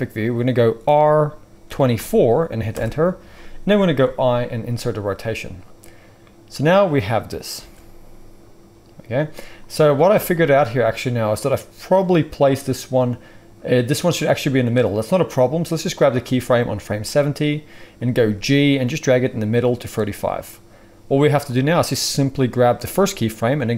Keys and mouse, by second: 0.8 r, 4.0 i, 7.5 space, 10.0 space, 18.1 g, 19.7-21.4 middle drag, 21.4-23.7 drag.